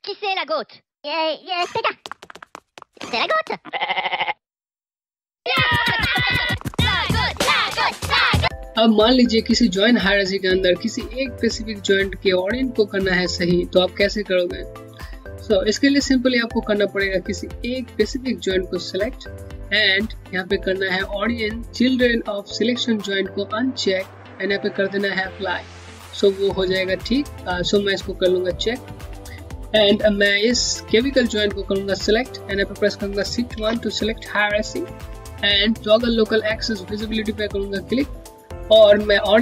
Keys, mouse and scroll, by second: 17.7 click, 23.6 click, 27.4 click, 37.4 !, 37.4 click.